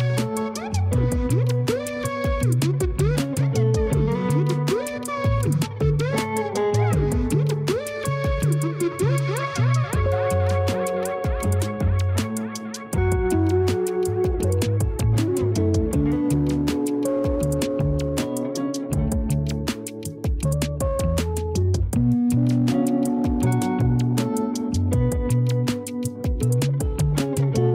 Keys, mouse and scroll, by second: 1.1 click, 4.2 click, 4.9 click, 9.4-11.3 drag, 23.6 scroll down 1, 25.3-26.4 drag.